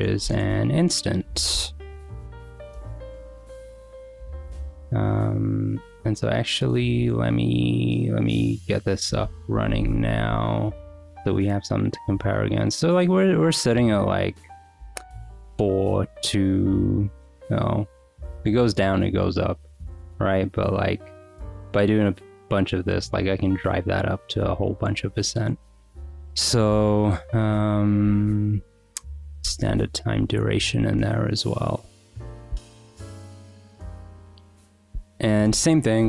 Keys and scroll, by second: 0.0-1.2 typing, 1.5 Return, 28.3-31.4 typing, 31.7 Return, 32.0 Escape, 32.4-33.1 typing, 34.5 Return, 34.9 l, 35.4 Return.